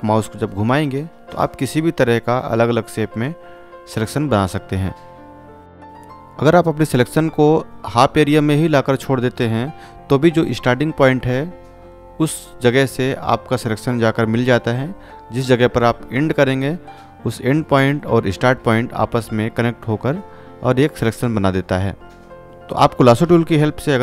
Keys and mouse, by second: 1.9-5.6 drag, 5.8-16.3 drag.